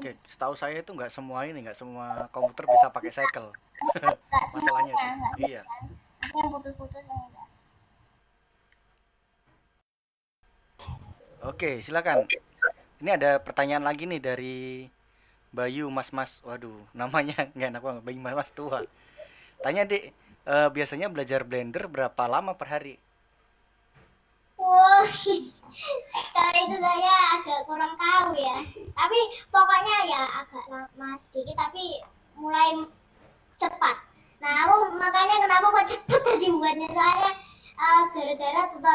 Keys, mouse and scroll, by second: 0.2-2.6 scroll down 1, 2.6-5.6 scroll down 1, 5.6-10.9 scroll down 1, 10.9-12.3 scroll down 1, 12.3-28.6 middle drag, 28.6-29.6 scroll up 1, 29.6-29.9 scroll down 1, 29.9 middle click, 30.3-30.9 scroll up 1, 31.8-38.9 middle drag.